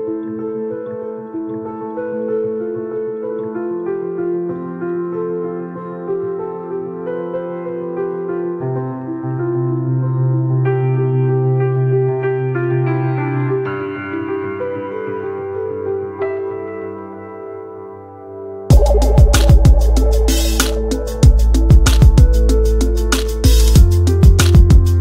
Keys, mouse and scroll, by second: 1.0-2.2 alt+drag, 2.2 space, 2.4 click, 2.4 space, 3.0-5.6 alt+drag, 5.6 space, 5.7 click, 5.8 space, 6.4-11.6 alt+drag, 12.0 ctrl+z, 12.1 ctrl+click, 13.2 space, 14.0-15.5 alt+drag, 15.8 a, 16.5 p, 17.1 ctrl+click, 17.9 space, 18.0 click, 18.0 space, 18.2 click, 18.3 click, 18.3 space, 18.4 space, 19.4-21.7 alt+drag, 21.7 space, 21.8 click, 21.9 space, 22.0-24.7 ctrl+drag, 24.7 space, 24.8 click, 24.9 space.